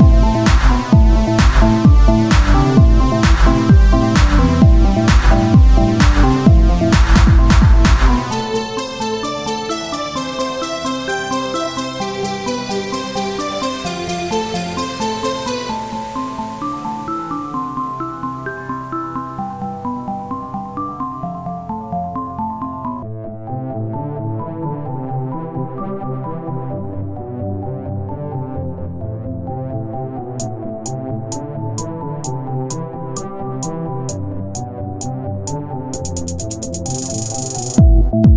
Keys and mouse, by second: 0.0 c, 1.1-2.7 drag, 3.5 z, 4.5 KP_3, 5.9 c, 6.8 KP_1, 7.1 z, 9.7-13.6 drag, 9.7-13.0 right drag, 13.6-17.9 right drag, 15.2 click, 17.9 e, 20.1 click, 20.3-21.6 right drag, 21.6-22.9 drag, 22.9 right click, 23.6 KP_1, 24.2 e, 28.5-29.6 drag, 29.6-31.1 right drag, 31.1 click, 32.1 right click, 32.8 KP_1, 34.0 e, 36.4-38.3 drag.